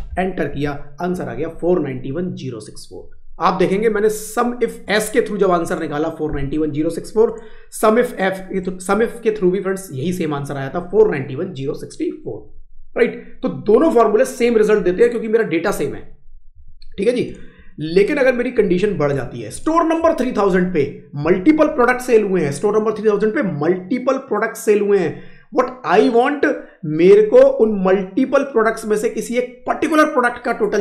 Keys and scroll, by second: 0.4 Up.